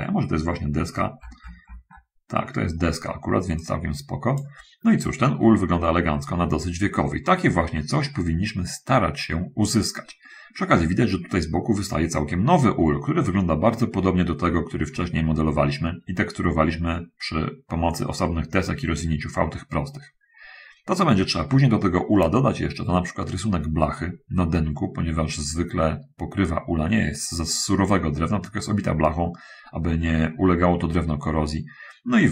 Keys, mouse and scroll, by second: 1.0-2.3 scroll up 2, 3.9 click, 4.9 middle click, 5.3 middle click, 6.4 middle click, 6.9 scroll up 1, 11.0 middle click, 14.9-15.3 scroll up 1, 22.0-23.0 middle drag.